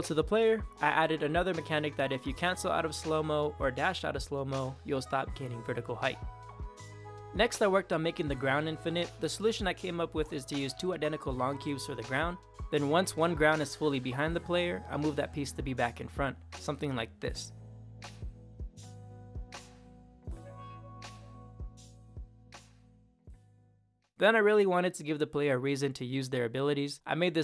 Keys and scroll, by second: 0.8 Left, 1.2 Left, 3.1 Up, 3.6 Left, 4.4 Down, 4.6 space, 5.1 Up, 5.5 Left, 5.7 Right, 6.4 Left, 24.1-27.4 typing.